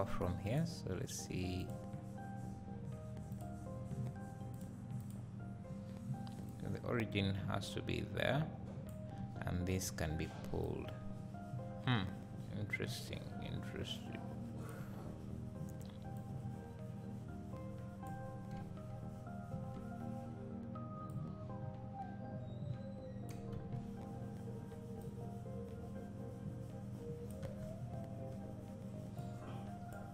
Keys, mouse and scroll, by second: 0.4 click, 1.6 click, 3.3 click, 4.5 click, 5.0 click, 6.4-25.2 drag, 9.4 Tab, 14.6 right click, 15.8 Tab, 23.8 Tab, 29.2 click.